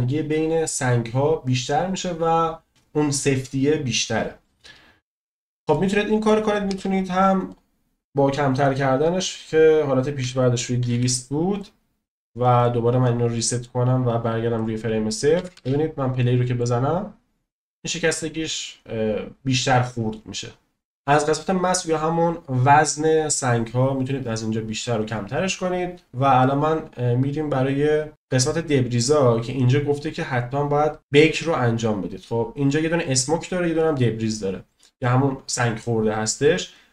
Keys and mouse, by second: 2.8 space, 5.7-6.2 middle drag, 6.6 space, 7.6-11.6 drag, 10.9 0, 13.4 middle click, 15.5 space, 16.2 middle click, 26.5-29.1 drag.